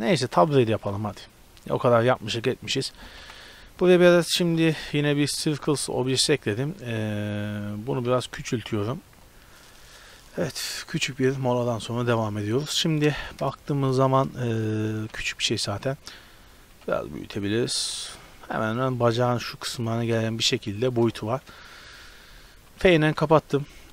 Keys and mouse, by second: 0.3-0.8 drag, 0.8 shift+a, 3.2 KP_Decimal, 5.3-6.5 drag, 6.5-9.1 drag, 8.1 s, 11.9-13.4 middle drag, 13.4 KP_0, 13.7-14.5 middle drag, 14.5 middle click, 15.1 s, 16.9 s, 17.9-19.9 drag, 20.5-21.4 drag, 21.4 Tab, 22.7 f.